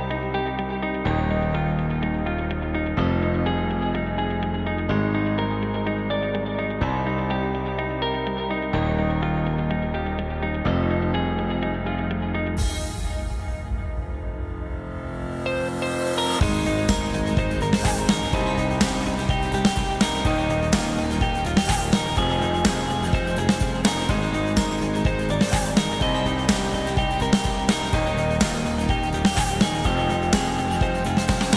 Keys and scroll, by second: 0.7 0.